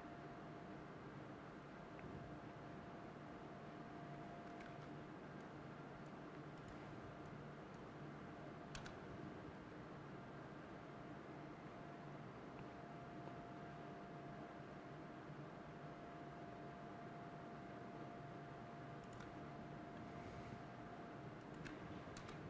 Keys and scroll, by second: 4.2 ctrl+z, 8.2 BackSpace, 21.7 BackSpace.